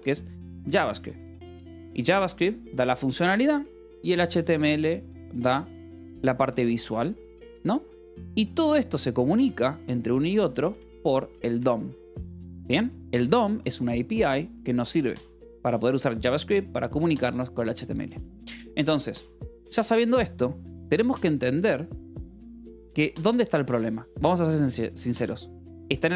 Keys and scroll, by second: 0.0-4.8 typing, 3.2 Escape, 6.6 Escape, 7.0 l, 7.9 a, 9.2 space, 9.7 =, 10.5 space, 11.4 Escape, 12.3-14.1 typing, 14.0 Escape, 15.2 v, 15.8 Escape, 16.2 h, 17.5-19.3 typing, 19.9 Return, 20.6-22.5 typing, 23.4 Escape, 23.7 l, 24.9-26.1 typing.